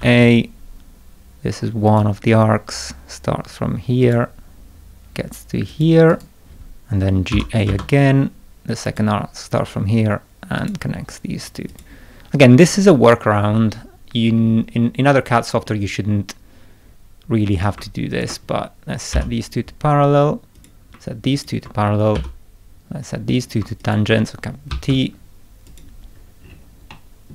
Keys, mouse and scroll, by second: 1.9 click, 4.0 click, 5.7 click, 6.1 right click, 7.3 g, 7.7 a, 8.8 click, 10.6 click, 11.7 click, 12.6 right click, 14.2-14.7 scroll up 2, 15.3 middle click, 17.5 click, 18.1 ctrl+click, 19.1 p, 20.5 click, 21.3 ctrl+click, 22.1 p, 23.3 click, 23.8 ctrl+click, 24.7 t, 25.7 click, 26.1 scroll up 2, 26.4-26.7 scroll down 2, 26.9 middle click, 27.0 scroll up 2.